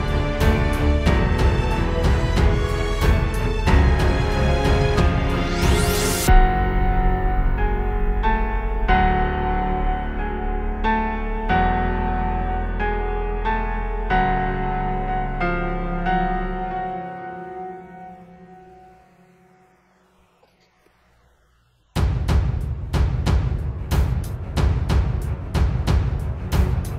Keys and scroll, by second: 7.9 super+z, 8.8 super+z, 18.2 super+z, 21.3 super+z.